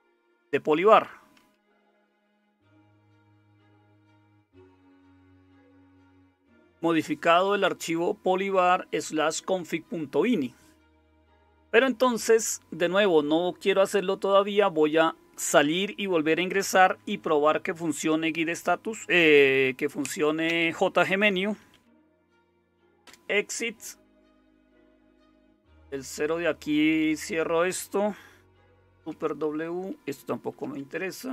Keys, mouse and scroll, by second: 1.5-5.8 typing, 21.5-22.7 typing, 23.0 Return, 25.5 super+0, 29.0 super+w, 30.5 super+w.